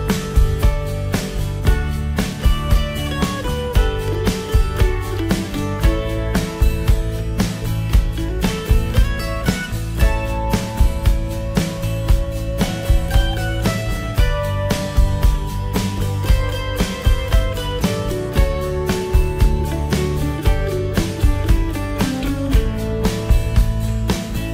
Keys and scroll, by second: 5.1 ctrl+j, 21.9 ctrl+z.